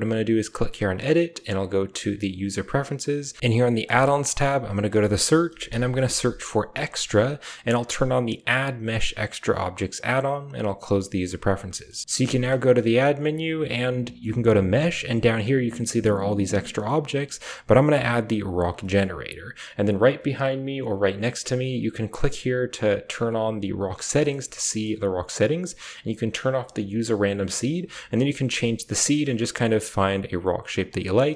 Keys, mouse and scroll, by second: 1.1-1.9 drag, 12.0 ctrl+space, 12.0 Delete, 12.1 shift+a, 18.7 shift+click, 23.8 drag, 24.0 shift+middle drag, 24.2 drag, 24.4 shift+middle click, 27.6 click, 28.0 click, 29.4 click.